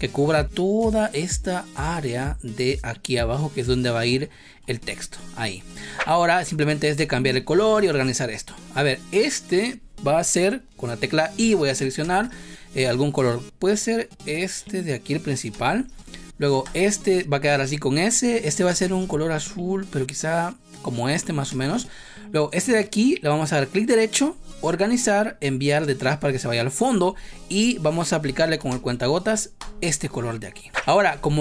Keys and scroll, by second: 5.5 v, 6.9 space, 12.0 space, 15.5 space, 18.6 space, 21.0 v, 21.4 space, 28.7 space.